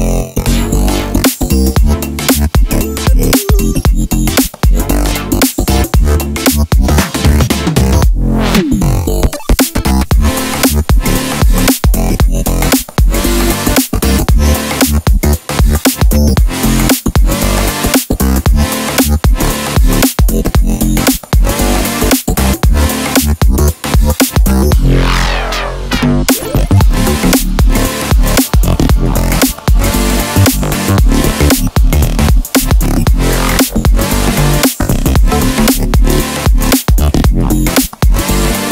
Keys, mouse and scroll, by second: 2.4 click, 2.8-4.3 middle drag, 3.5 scroll down 2, 4.3 click, 4.5 ctrl+s, 4.7-11.1 shift+middle drag, 8.5-10.2 scroll up 1, 11.1 click, 11.4 Tab, 11.8 click, 12.1 alt+click, 12.5 click, 12.7 click, 12.8 2, 13.0 alt+click, 14.0 shift+d, 14.2 Return, 14.9 click, 15.3 Tab, 15.6-18.9 middle drag, 16.2 e, 18.3 ctrl+z, 18.9 click, 19.4 e, 22.1 ctrl+shift+click, 22.3-24.4 middle drag, 22.5 KP_0, 23.4 g, 24.4 ctrl+shift+click, 24.7 a, 24.9-27.8 shift+middle drag, 25.3 scroll up 2, 25.8 scroll up 2, 27.8 alt+e, 32.3-33.9 drag, 34.0 middle click, 34.8-35.1 scroll up 2, 35.1 3, 35.3 alt+click, 35.6-38.7 middle drag, 36.1 scroll down 1.